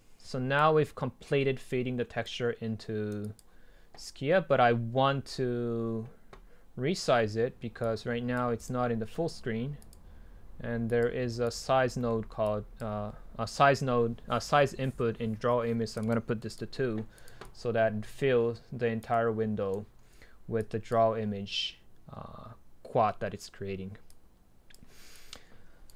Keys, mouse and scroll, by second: 0.0-1.8 drag, 1.8-2.3 scroll up 2, 2.3-3.1 right drag, 3.1 middle click, 3.2-5.4 drag, 7.9-12.0 drag, 12.0-12.5 middle drag, 12.5-14.6 drag, 17.9-19.1 drag, 19.1-19.6 right drag, 24.2 click.